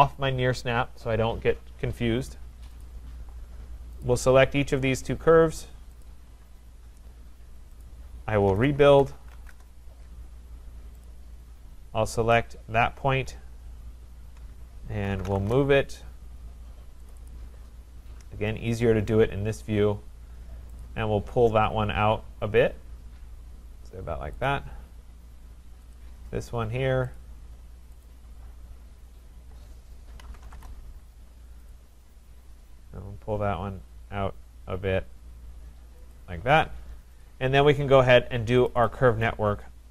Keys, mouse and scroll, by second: 2.8 click, 4.1 click, 6.0 shift+click, 7.8 click, 8.4-9.6 typing, 11.1 click, 12.4 click, 14.8-15.7 typing, 17.1 click, 17.3 click, 18.6 Return, 18.7-20.4 scroll, 20.8 click, 24.4 click, 26.0 click, 27.2 click, 28.0 click, 28.6-30.0 scroll, 30.0-30.9 typing, 30.0 scroll, 31.7 click, 36.2 click, 37.2 click, 38.7 click, 38.9 click.